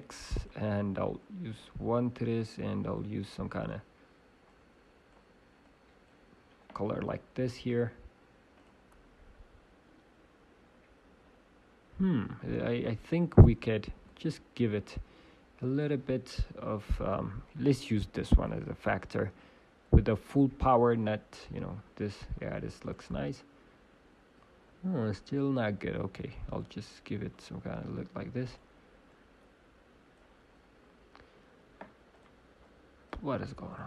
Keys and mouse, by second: 0.3-4.3 drag, 0.3-1.7 right drag, 7.6-10.6 drag, 9.8 right click, 13.3-15.3 drag, 13.9 shift+d, 16.3 Delete, 17.4-19.4 drag, 20.8 click, 22.8 middle click, 22.9-24.8 drag, 26.2 middle click, 26.5-28.5 drag, 30.5 middle click, 32.1-33.8 drag.